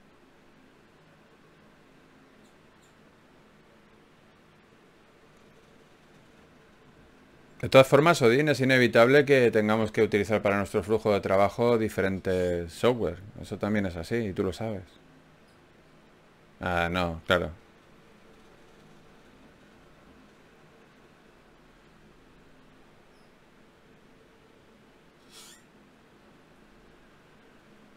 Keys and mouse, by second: 0.5 ctrl+Tab, 3.0-5.2 drag, 5.6 right click, 6.4 g, 7.4 g, 8.6 g, 9.4 g, 10.2 g, 11.2 g, 13.0 g, 15.2 click, 21.0 f, 21.7 ctrl+Tab, 23.5 f, 23.7 f, 24.1 f, 25.3 click, 25.5 f, 25.9 right click.